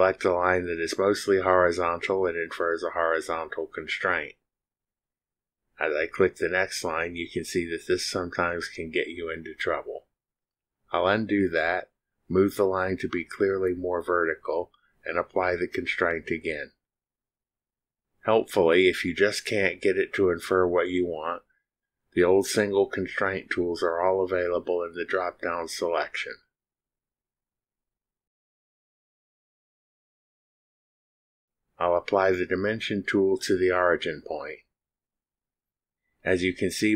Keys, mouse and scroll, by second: 3.9 click, 8.0 click, 12.2 ctrl+z, 13.2 click, 14.0 click, 16.4 click, 18.5 click, 20.6 click, 22.4 click, 23.4 click, 31.0 click, 33.8 click.